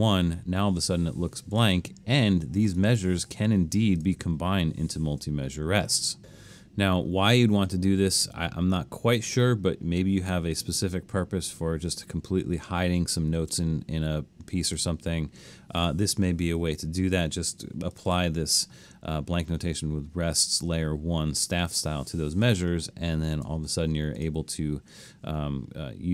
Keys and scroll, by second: 7.7 super+z, 13.4 super+z, 21.5 BackSpace.